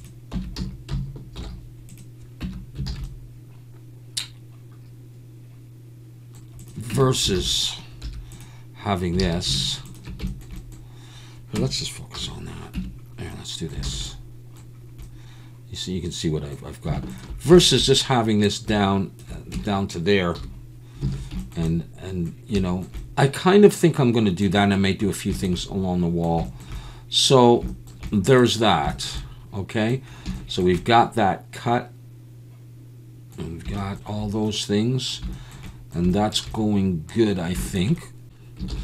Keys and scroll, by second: 0.3 Tab, 0.6 a, 1.4 alt+n, 2.4 Tab, 2.9 alt+a, 6.9 Tab, 7.4 alt+a, 8.0 2, 9.2 alt+a, 9.3 Tab, 11.6 Tab, 12.2 /, 12.7 Tab, 13.8 alt+a, 13.9 Tab, 13.9 /, 19.5 Tab, 20.4 /, 21.0 alt+a, 38.7 ctrl+s.